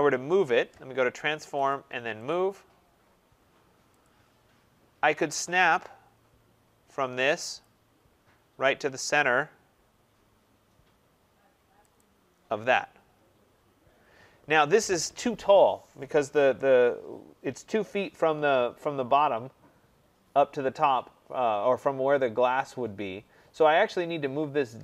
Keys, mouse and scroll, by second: 1.6 click, 2.2 click, 3.9 click, 4.7 middle click, 4.8 middle click, 4.9 middle click, 5.6 middle click, 5.7 middle click, 7.3 scroll, 7.5 click, 8.8-9.4 scroll, 11.9 click, 11.9-12.8 scroll up 4, 13.6-14.1 scroll down 4, 14.7 scroll down 4, 14.8-16.2 scroll.